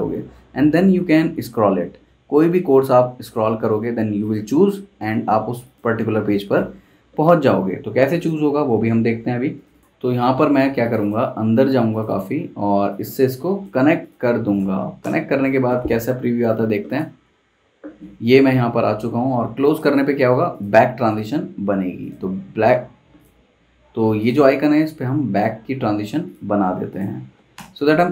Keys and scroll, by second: 15.0 super+Return, 27.5 super+Return.